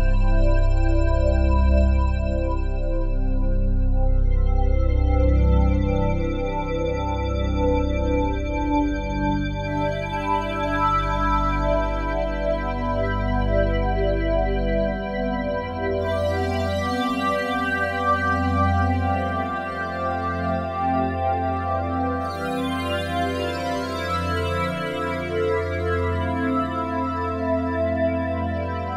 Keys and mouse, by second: 0.5-1.6 shift+drag, 2.2 a, 3.3-4.2 typing, 4.2 middle click, 4.2 click, 5.0 click, 5.3 space, 7.0-7.7 typing, 9.1 typing, 12.2 space, 13.0 ctrl+s, 15.8-18.1 alt+shift+drag, 18.7 ctrl+s, 20.4-22.2 drag, 20.4 typing, 23.4 i, 24.4-26.1 drag, 26.5 Left, 26.6 Left, 26.8 Left, 27.3 Left, 28.7 i.